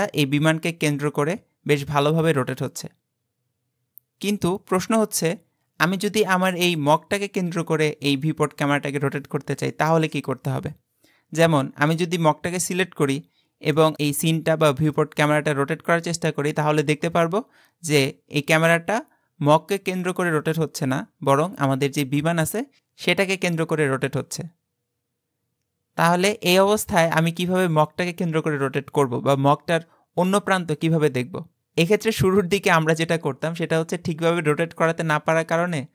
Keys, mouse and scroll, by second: 6.8 click, 13.8-14.9 middle drag.